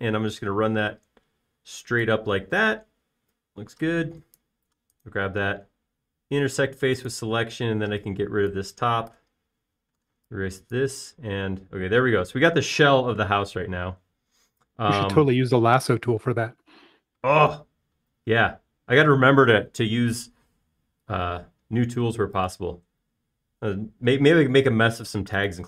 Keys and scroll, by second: 3.7 space, 10.5 BackSpace, 10.8 e, 17.1 r, 19.7 space, 25.3 Escape.